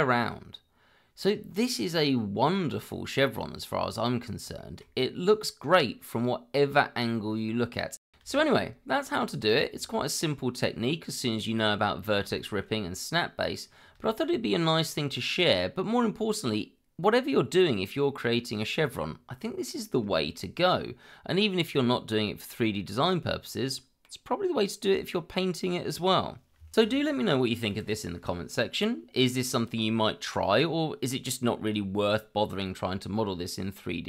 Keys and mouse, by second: 4.6 shift+middle drag, 5.2-15.2 middle drag, 16.3-20.9 middle drag.